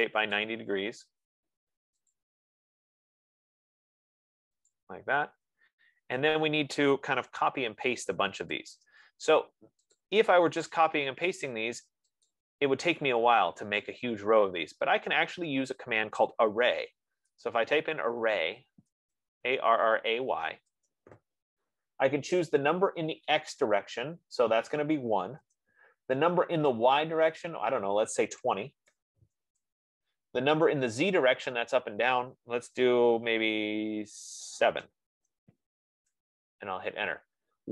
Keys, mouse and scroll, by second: 0.7 click, 2.5 click, 2.9 typing, 5.1 shift+click, 8.5-10.4 typing, 10.4 click, 11.7 typing, 12.6 click, 17.2-20.3 typing, 20.9 Return, 25.2-25.9 typing, 27.0 Return, 28.7-29.9 typing, 35.1 7, 36.4 Return.